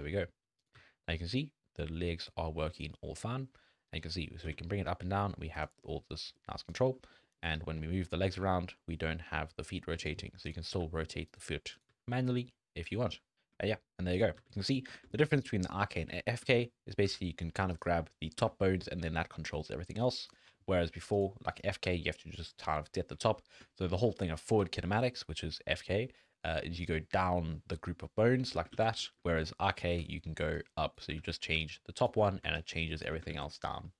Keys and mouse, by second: 0.8 g, 5.8-6.2 drag, 6.4 click, 7.0 click, 7.2 drag, 7.8 g, 10.7 r, 11.7 click, 11.9 g, 13.3 alt+g, 13.3 drag, 13.6 shift+drag, 14.4 g, 15.0 shift+middle drag, 15.2 g, 15.8 middle drag, 16.5 shift+middle click, 17.1 g, 18.4 g, 20.8 middle click, 21.3 middle click, 21.9 r, 23.2 shift+middle click, 23.7 shift+drag, 24.6-26.8 d, 26.8-28.5 drag, 28.5 d, 28.7 ctrl+z, 30.0-33.1 typing, 30.6 click, 31.2 ctrl+z, 31.7 click, 32.6 click, 33.3 ctrl+z.